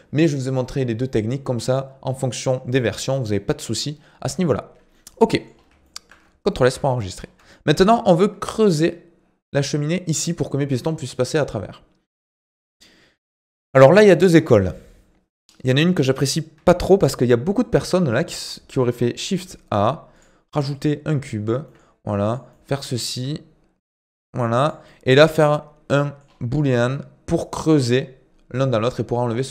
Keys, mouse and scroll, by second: 4.4-4.9 scroll down 10, 4.9 middle click, 5.5 scroll up 1, 5.8 shift+middle click, 6.6 ctrl+s, 6.9 middle click, 7.1-7.5 scroll up 4, 7.5-10.6 shift+middle drag, 18.2 shift+a, 20.7 middle click, 21.6 s, 22.5 middle click, 23.1 s, 24.8-26.2 middle drag, 26.2-26.6 scroll up 4, 26.6-29.5 shift+middle drag.